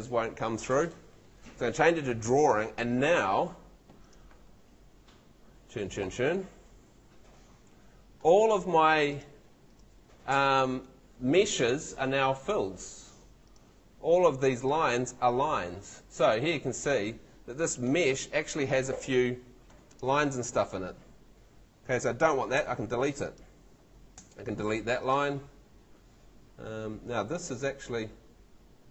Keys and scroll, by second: 22.6 BackSpace, 24.1 BackSpace.